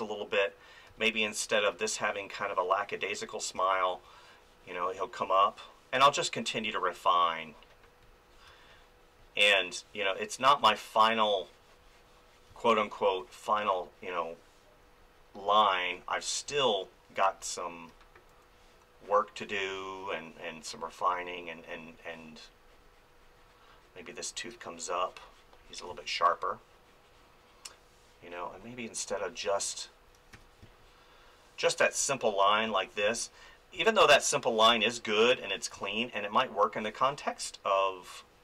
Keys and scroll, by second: 0.9 space, 3.1 ctrl+z, 3.5 space, 8.5 space, 12.5 space, 16.5 space, 25.9 space, 29.4 space, 30.3 f, 30.6 space, 32.7 ctrl+z, 33.0 space, 35.3 ctrl+z, 35.7 space.